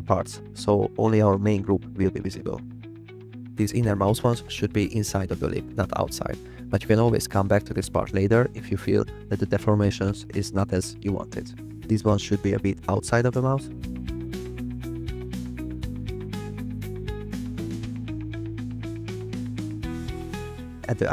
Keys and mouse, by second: 2.0 click, 2.2 g, 3.0 click, 4.6 click, 4.8 g, 5.3 click, 5.7 click, 5.8 g, 12.1 click, 12.3 g, 13.3 click, 14.2 click, 14.7 g, 15.5 click, 15.7 g, 16.8 click, 17.0 g, 18.4 click, 18.8 g, 20.8 click.